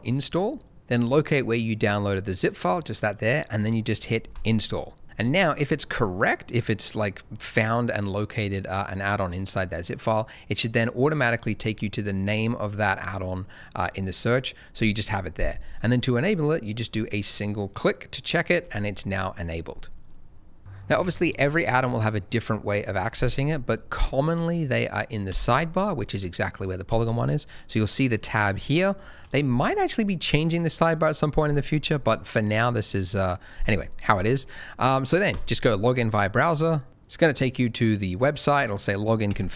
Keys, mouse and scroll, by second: 1.7 click, 15.5 click, 20.6 click, 25.2 n, 28.0 click, 28.4 double click, 35.3 click.